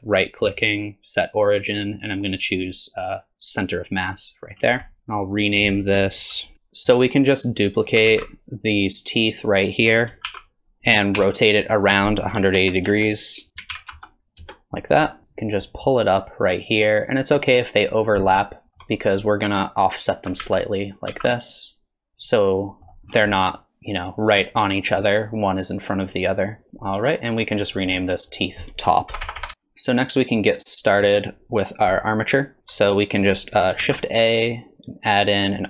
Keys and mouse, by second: 4.9 middle click, 5.3 click, 5.4-6.5 drag, 6.5-6.9 shift+middle drag, 8.1 alt+z, 10.3 shift+d, 11.2 r, 15.2 KP_1, 15.2 KP_3, 15.7-18.7 drag, 18.7 shift+middle click, 19.3 click, 20.4 alt+z, 21.1 alt+z, 21.6 click, 22.1 alt+z, 22.1-22.9 middle drag, 23.3 drag, 25.0-26.7 middle drag, 27.6 click, 27.8-29.5 drag, 29.3 BackSpace, 29.4 BackSpace, 29.5-31.0 middle drag, 33.8 shift+a.